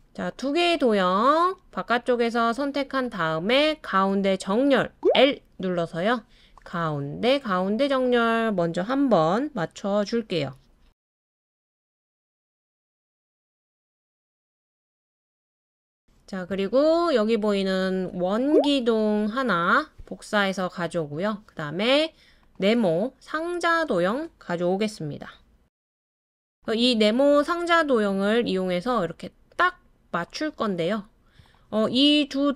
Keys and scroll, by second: 5.0 typing, 18.4 super+c, 18.7 super+v.